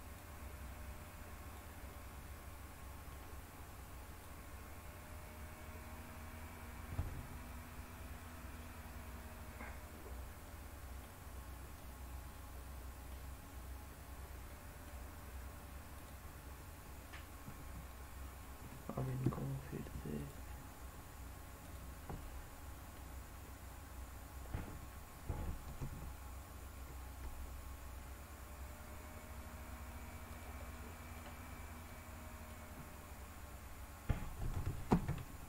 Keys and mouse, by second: 0.1-1.5 drag, 1.8-3.1 middle drag, 4.1-6.9 drag, 10.5 middle click, 11.8-13.1 middle drag, 14.5 middle click, 15.9 click, 20.1 shift+click, 22.1 middle click, 25.7-27.2 g, 30.3 click, 30.7 middle click, 32.0 middle click, 34.9 ctrl+z.